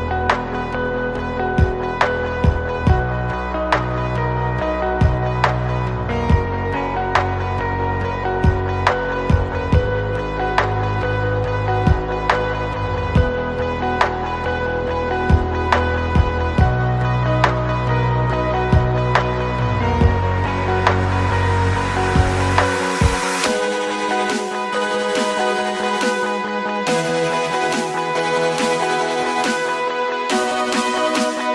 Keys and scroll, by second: 0.0 KP_0, 0.0 KP_7, 0.1 KP_5, 1.3 KP_1, 1.5 Return, 4.1 space, 4.6 space, 5.6 Escape, 7.0 shift+v, 7.5 Escape, 8.0 m, 8.5 ctrl+z, 8.9 ctrl+n, 10.2 Escape, 14.0 Escape, 14.8 Escape, 17.9 d, 20.6 space, 21.3 shift+z, 22.4 space, 23.0 z, 23.1 space, 23.1 Escape, 24.1 ctrl+c, 24.2 Escape, 25.3 ctrl+c, 25.9 v, 30.4 ctrl+z, 31.0 Escape.